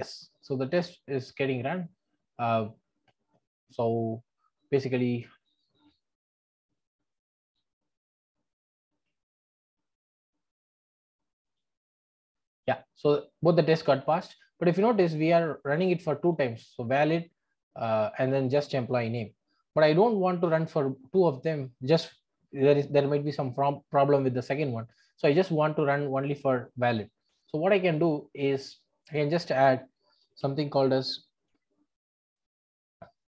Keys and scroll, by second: 6.8 super+`, 7.9 super+`, 10.8 Escape, 32.6 Tab.